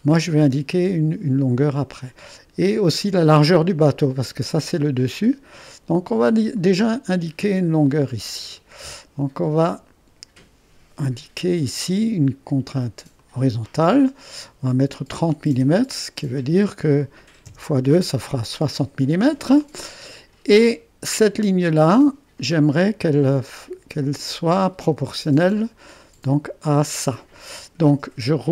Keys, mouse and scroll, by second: 0.0-5.1 drag, 6.6 click, 8.3-11.5 drag, 13.2-14.4 drag, 15.2 3, 15.6 0, 17.5 Return, 21.3 click.